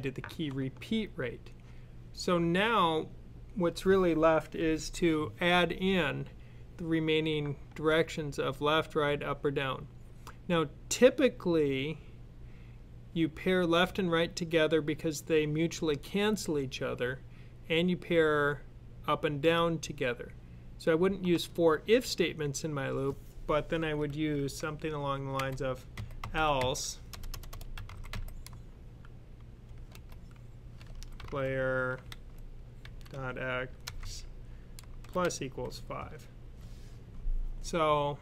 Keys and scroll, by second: 25.8-28.0 typing, 29.5 typing, 30.6-33.9 typing, 34.9-35.9 typing.